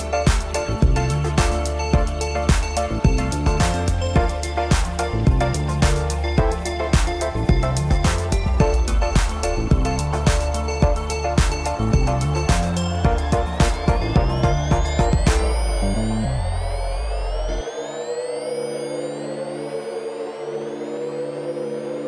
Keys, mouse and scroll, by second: 0.1-0.6 scroll up 8, 0.6 click, 1.0 shift+click, 1.3 shift+click, 1.6 shift+click, 1.8 shift+click, 2.1 shift+click, 2.3 shift+click, 2.5-3.0 scroll down 2, 3.0 drag, 3.3 click, 3.7 click, 3.8-4.2 scroll down 4, 4.2 KP_1, 4.6-5.6 middle drag, 5.6 click, 5.9 Tab, 6.2 KP_Divide, 6.5 scroll down 1, 6.6 middle click, 6.9 scroll up 2, 7.1 click, 7.5 shift+click, 8.0 shift+click, 8.4 ctrl+l, 9.0 scroll up 4, 9.2 middle click, 9.9 scroll down 5, 10.1 click, 10.3 scroll up 3, 10.8 click, 13.6 scroll up 3, 13.9 drag, 14.2 click, 14.6 drag, 16.0 scroll up 1, 16.1 middle click, 16.4 scroll down 2, 16.7 Tab, 16.8-17.2 scroll up 1, 17.2 ctrl+KP_Add, 17.8 click, 18.2 scroll down 2, 18.5 click, 18.6 scroll up 2, 18.8 scroll down 4, 19.1 KP_7, 19.5 click, 19.8 Tab, 20.0-20.4 scroll up 1, 20.4 shift+d, 21.4 shift+d.